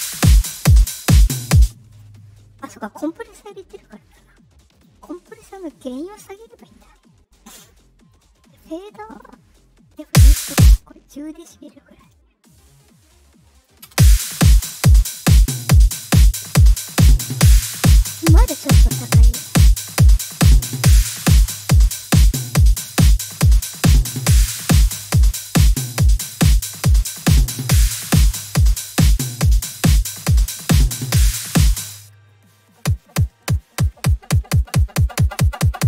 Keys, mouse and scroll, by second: 1.5 space, 2.5 click, 4.7 click, 6.4 right click, 7.3 click, 9.1 click, 10.0 space, 10.5 space, 10.6-13.6 drag, 13.8 space, 20.1-30.4 drag, 31.8 space.